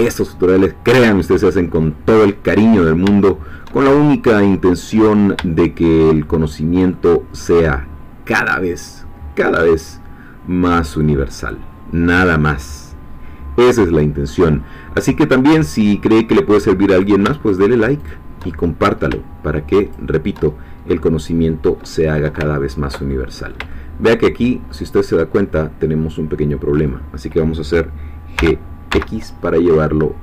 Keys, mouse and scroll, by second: 0.4-3.1 middle drag, 3.2-5.2 shift+middle drag, 5.6-7.9 shift+middle drag, 7.9 scroll down 1, 8.4-14.5 middle drag, 14.5-14.8 scroll up 1, 15.0-16.9 middle drag, 16.9 click, 17.6 shift+click, 18.5 shift+middle click, 19.9 shift+click, 20.6 shift+scroll down 2, 20.9-22.4 middle drag, 22.5 ctrl+middle click, 23.5 shift+middle click, 24.7-27.0 middle drag, 28.4 g, 29.3 x.